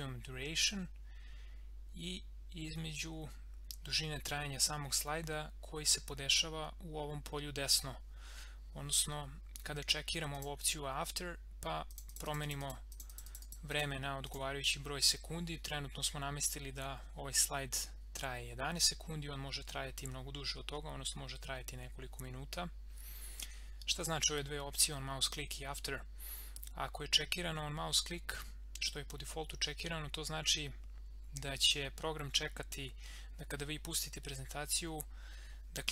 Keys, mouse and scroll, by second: 10.3 click.